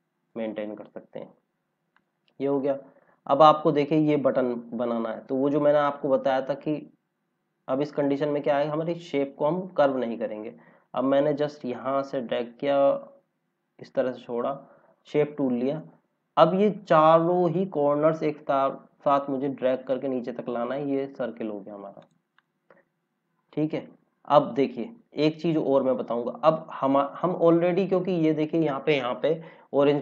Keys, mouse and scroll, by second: 1.3 scroll down 1, 1.9 click, 3.7 scroll up 1, 5.5 click, 6.0-6.7 scroll down 1, 11.5 click, 15.7 scroll up 1, 16.8 scroll down 1, 17.8-19.1 scroll up 1, 19.1 click, 22.6 scroll down 1, 27.3 click, 29.3 scroll up 1.